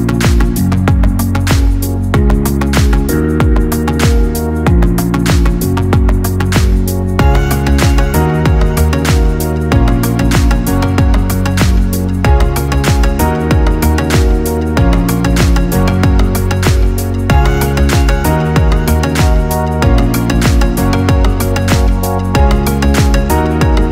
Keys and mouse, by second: 0.6 g, 3.2 click, 4.1 Tab, 5.7 click, 5.9 click, 7.7 click, 8.6-10.3 ctrl+middle drag, 10.3 shift+click, 11.2 shift+click, 12.0-13.9 middle drag, 13.9 click, 14.8-16.2 drag, 16.2 ctrl+z, 17.6 g.